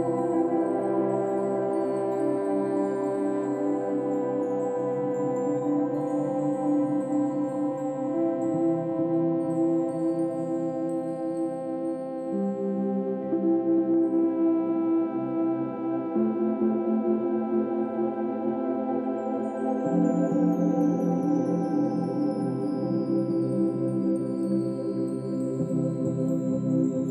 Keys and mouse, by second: 1.1 click, 1.9 click, 2.4 shift+click, 3.2 shift+click, 3.7 alt+shift+click, 4.1 alt+click, 5.0 ctrl+alt+shift+click, 5.8 ctrl+alt+click, 6.4 ctrl+alt+shift+click, 7.3 ctrl+alt+click, 12.6-13.3 alt+drag, 13.4-14.3 drag, 16.2-18.3 ctrl+alt+drag, 18.7-19.7 ctrl+alt+drag, 19.9 ctrl+alt+shift+click, 20.6 alt+shift+click, 21.4 alt+shift+drag, 22.1 ctrl+alt+shift+drag, 22.9 ctrl+alt+click, 23.6-24.4 drag, 25.3 click, 25.6 click, 26.4 click.